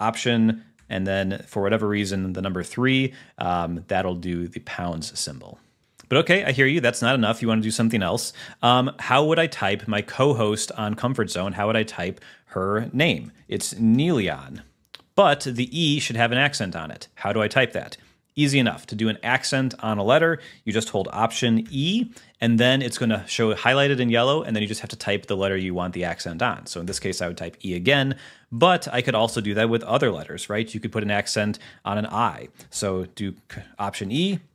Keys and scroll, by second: 1.0 alt+3, 5.8 super+h, 6.5 super+a, 6.8 BackSpace, 15.4 Left, 20.3 BackSpace, 21.8 alt+e, 27.0 e, 28.9 Down, 29.5 Return, 33.6 alt+e.